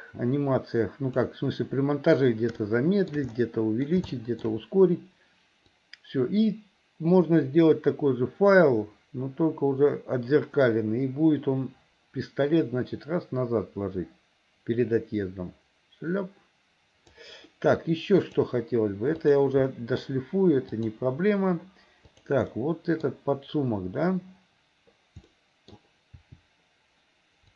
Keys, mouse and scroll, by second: 2.6 shift+middle click, 3.4 middle click, 4.1 shift+middle click, 5.8-17.3 drag, 18.2 click, 19.2 click, 19.7 middle click, 20.7 click, 22.2 click, 22.5 middle click, 25.4 middle click, 26.2 r.